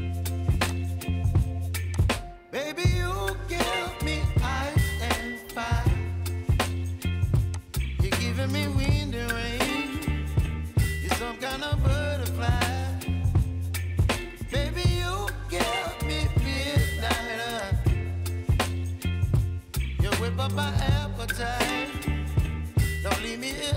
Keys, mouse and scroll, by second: 0.6-23.7 drag.